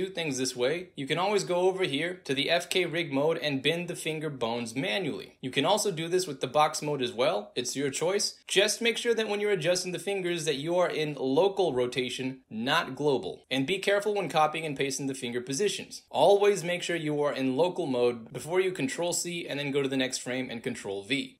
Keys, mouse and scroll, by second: 0.3 alt+z, 0.4-1.1 alt+drag, 2.2 alt+click, 3.1 click, 3.3 e, 3.4-4.0 drag, 4.2 ctrl+z, 4.3-4.7 drag, 5.8 click, 6.8 e, 7.4-9.0 drag, 9.6 ctrl+z, 10.3 click, 12.1 click, 12.5 click, 13.9 click, 14.1 click, 17.7 click, 18.8 ctrl+c, 19.0 drag, 19.3 alt+right click, 19.5 alt+middle click, 19.6 alt+right click, 19.6 alt+click, 19.7 alt+right click, 19.9 alt+click, 20.4 ctrl+v.